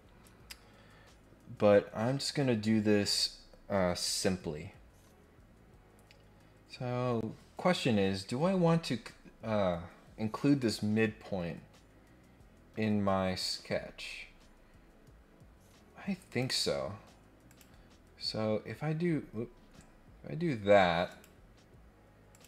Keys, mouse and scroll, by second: 13.5 scroll down 1, 16.2 click, 17.4 click, 21.1 click, 22.3 click.